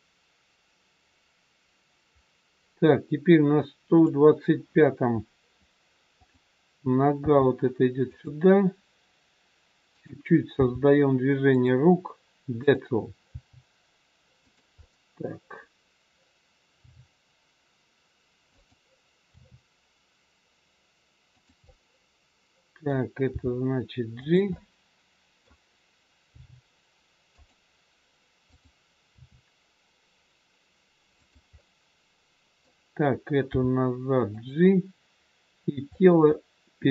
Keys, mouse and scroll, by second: 6.1 click, 7.1 g, 10.0 click, 10.7 g, 12.6 click, 13.4 g, 14.9 middle click, 16.7 g, 19.3 r, 21.6 middle click, 23.2 g, 24.5 middle click, 26.3 g, 28.5 click, 29.2 r, 31.5 middle click, 33.5 g, 35.9 middle click.